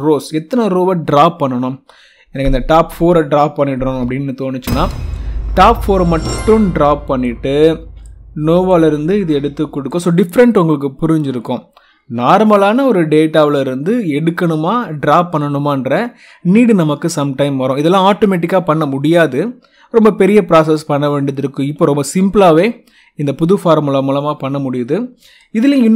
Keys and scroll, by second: 2.8 4, 4.6 Return.